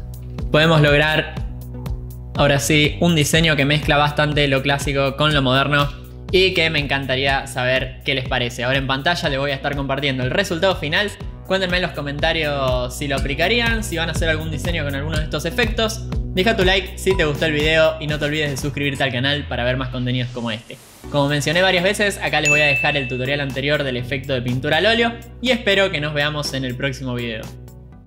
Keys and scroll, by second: 2.3 ctrl+t, 7.3 Return.